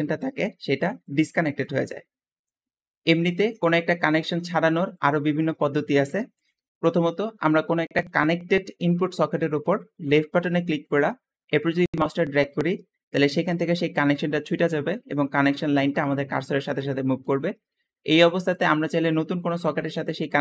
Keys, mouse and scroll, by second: 1.2 click, 3.1 Escape, 3.5-4.4 scroll down 3, 4.4 middle click, 5.0 scroll up 1, 5.2 middle click, 5.9-6.7 middle drag, 10.3 click, 18.9-20.4 drag.